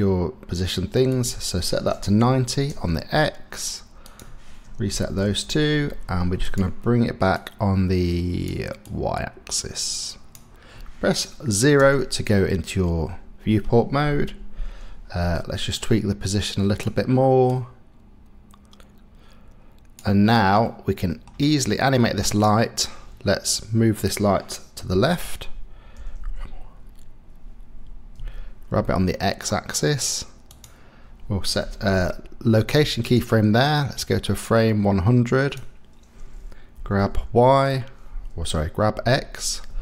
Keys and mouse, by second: 1.3-2.7 drag, 4.0-6.4 drag, 7.3-8.5 drag, 8.9-10.3 drag, 11.8 KP_0, 15.7-16.8 middle drag, 17.5-19.9 middle drag, 20.6-21.3 middle drag, 22.4-23.4 middle drag, 24.9 KP_0, 25.9 g, 26.2 y, 28.3 x, 31.9 i, 34.0-35.5 drag, 36.7 g, 37.1 y, 38.9 x.